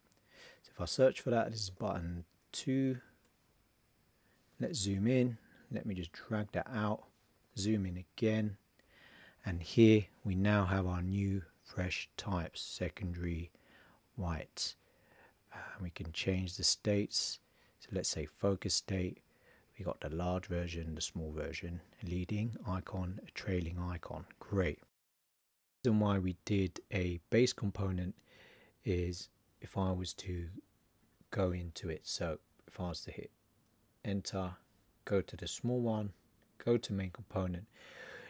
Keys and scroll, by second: 0.8 shift+i.